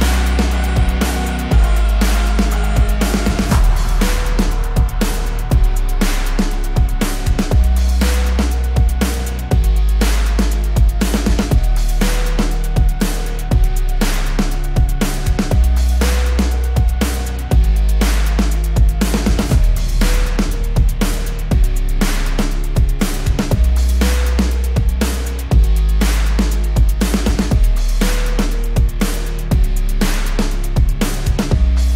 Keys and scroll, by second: 1.5 Escape, 7.4 KP_Subtract, 7.7 KP_2, 7.9 KP_0, 8.1 Return, 9.9 Escape, 14.2 Escape, 20.7 KP_2, 20.9 KP_5, 21.7 Return, 22.8 Escape, 31.6 KP_Subtract.